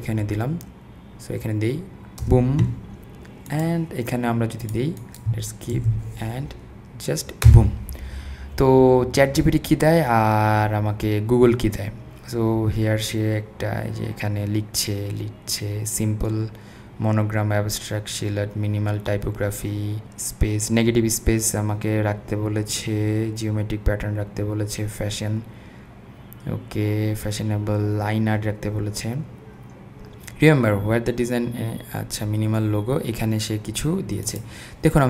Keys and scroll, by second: 2.2 Return, 5.8 super+v, 7.5 Return.